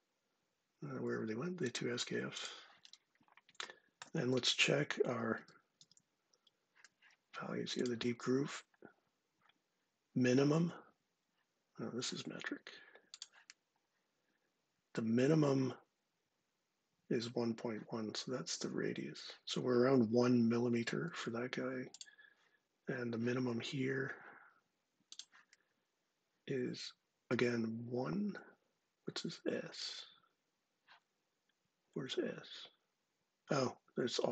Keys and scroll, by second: 4.1 super+Tab, 4.8 super+Tab, 5.1 super+Tab.